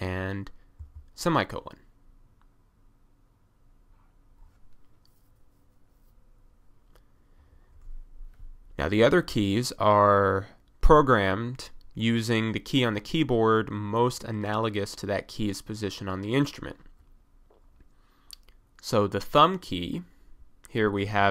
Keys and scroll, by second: 0.8 ;.